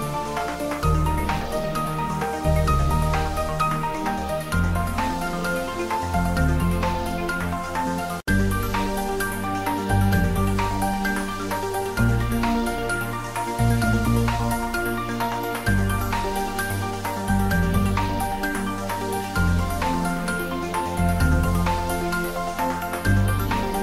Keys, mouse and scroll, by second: 1.0 click, 9.1 click, 10.2 ctrl+s, 13.1 click, 18.4 click, 18.9 x, 19.1 click, 20.2 shift+a, 20.5 click, 20.8 x, 21.5 c, 22.1 click, 22.8 middle click, 23.3-23.8 drag.